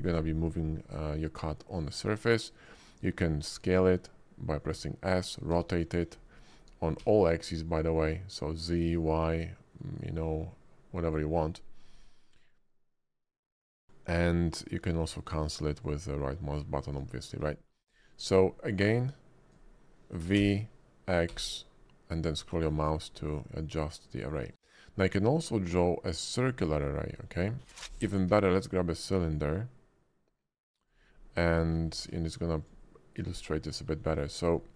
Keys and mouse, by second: 2.6 shift+click, 3.6 s, 4.6 click, 5.5 r, 7.0 x, 10.0-11.1 drag, 12.5-13.2 drag, 15.5 click, 15.8 click, 16.8 ctrl+z, 17.5 shift+middle click, 18.0 click, 18.8-19.5 drag, 20.4 v, 21.3 x, 24.5-26.1 drag, 26.3-26.8 shift+drag, 27.1 middle click, 27.6 shift+middle click, 28.0 x, 28.0 shift+a, 28.3 shift+a, 31.6 shift+click, 32.0 q, 33.7 middle click, 34.3 shift+middle click, 34.6 middle click.